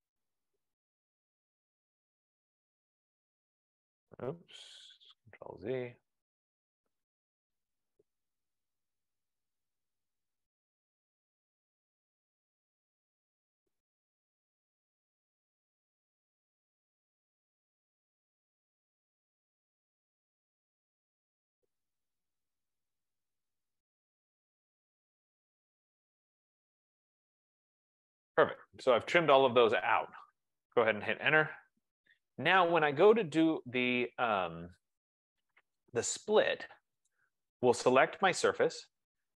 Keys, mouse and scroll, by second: 0.2 click, 1.9 click, 2.7 click, 3.5 click, 5.8 ctrl+z, 6.5 click, 7.7 click, 9.1 click, 9.9 click, 11.7-12.1 scroll, 12.5-13.3 scroll, 13.5-13.9 scroll, 13.9 click, 15.3 click, 16.9 click, 18.5 click, 19.8 click, 21.3 click, 22.1 F15, 22.2 click, 23.5 click, 25.1 click, 26.1 click, 27.9 click, 29.5 scroll, 31.3 Return, 37.2 click, 38.5 click.